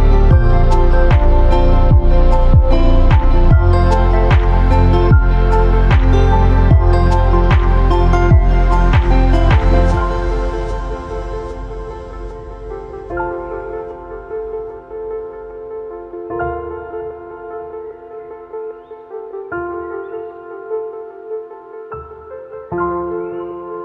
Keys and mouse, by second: 6.3 typing, 7.3 click, 7.8-8.6 typing, 10.5 click, 11.1-11.5 middle drag, 12.9 middle click, 13.3 shift+middle drag, 13.9-14.3 middle drag, 14.5 shift+a, 17.2-17.6 drag, 18.8-19.3 drag, 21.4 s, 22.4 shift+z, 23.2 KP_1, 23.3 KP_0.